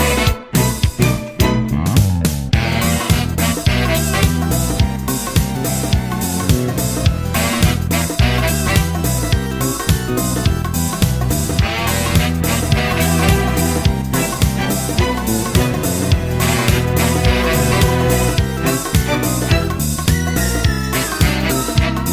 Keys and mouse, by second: 4.0 middle click, 4.3 middle click, 4.9 middle click, 5.6 right click, 6.1 right click, 8.2 middle click, 9.3 middle click, 9.6 middle click, 11.2 middle click, 11.8 right click, 17.8 middle click, 18.7 middle click, 19.9 middle click, 20.4 middle click.